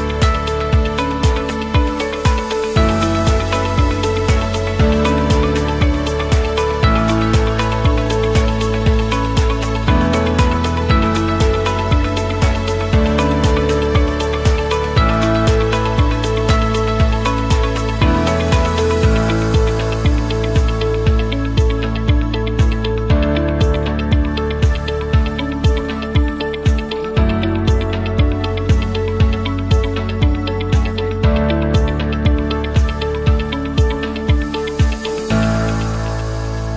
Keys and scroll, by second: 0.6-1.9 typing, 1.6 Return, 3.2 space, 8.6-9.5 typing, 11.8 p, 13.4-23.9 typing, 34.7 space.